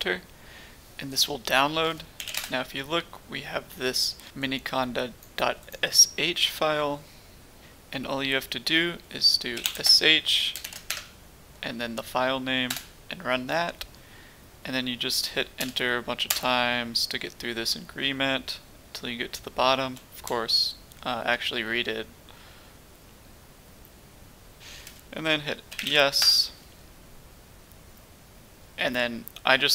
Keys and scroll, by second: 1.9-2.7 typing, 9.3-10.6 typing, 10.9 Tab, 12.7 Return, 12.8 typing, 13.8-14.5 typing, 15.6 Return, 16.3 typing, 16.8-19.9 Return, 20.2-24.6 Return, 25.4-27.9 typing.